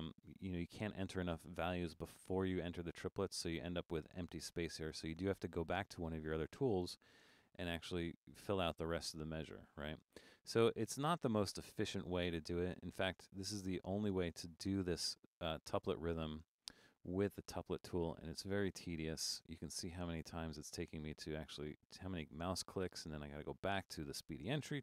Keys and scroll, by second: 7.4 6.